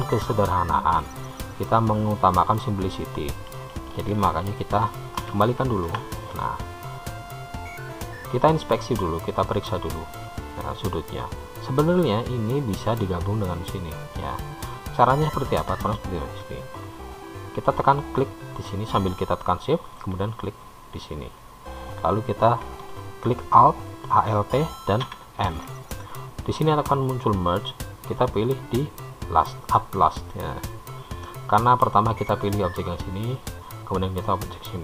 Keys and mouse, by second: 5.5 ctrl+z, 7.3 click, 7.8 middle click, 9.7 click, 18.3 click, 20.9 shift+click, 25.2 alt+m.